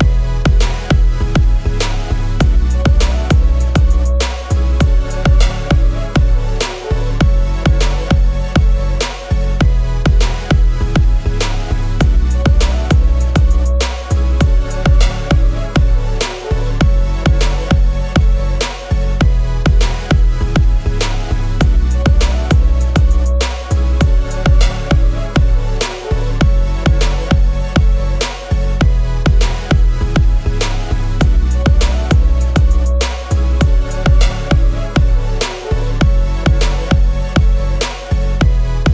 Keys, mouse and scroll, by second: 1.7 double click, 11.6 ctrl+a, 31.5 shift+click, 37.6-38.1 scroll.